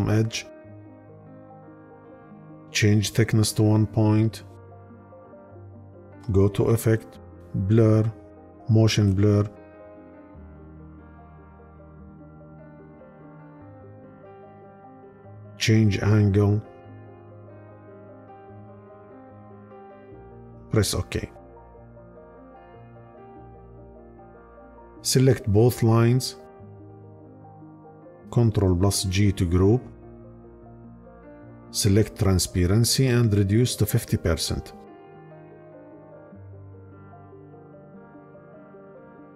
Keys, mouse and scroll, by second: 28.2 ctrl+g.